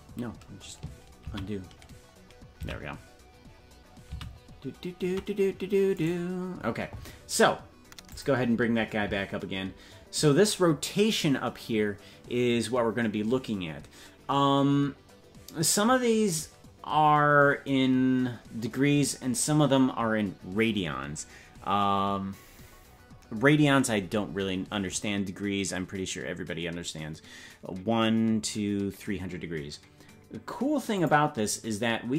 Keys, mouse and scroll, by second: 6.1 ctrl+z, 6.1 right click, 8.0-32.1 drag.